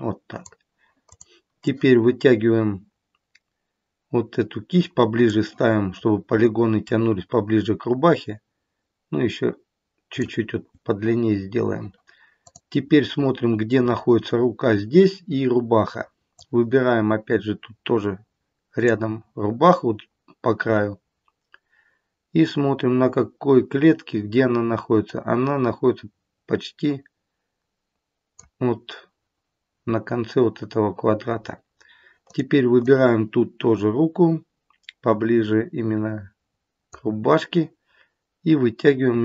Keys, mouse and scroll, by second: 0.9 click, 1.5 click, 6.8 click, 12.4 click, 16.3 click, 25.0 click, 32.2 click, 32.8 click.